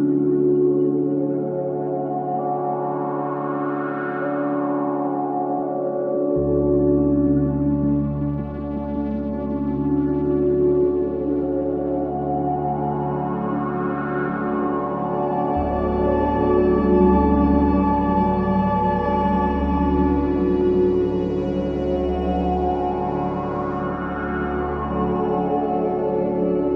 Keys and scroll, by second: 2.4 space, 4.4 space, 4.8 ctrl+z, 7.5 ctrl+z, 12.3 space, 14.0 space, 15.5 space, 19.3 space, 26.5-26.7 typing.